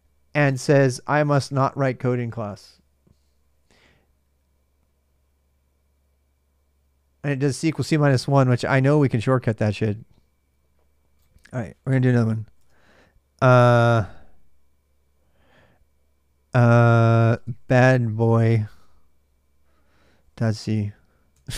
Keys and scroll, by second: 15.6 typing, 17.0-18.7 typing, 19.8-21.1 typing.